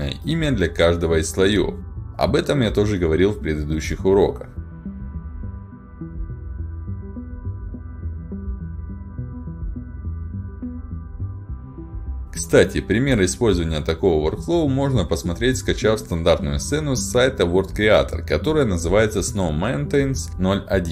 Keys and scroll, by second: 1.3-4.5 typing, 5.6-6.6 typing, 7.7-9.0 typing, 10.8 s.